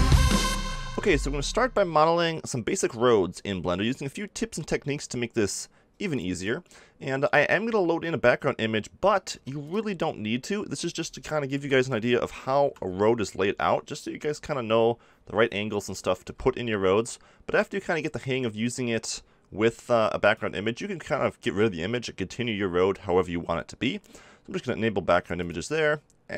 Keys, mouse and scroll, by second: 9.3 x, 10.5-12.5 drag, 11.5 KP_7, 12.6 KP_5, 16.2 n, 19.4 click.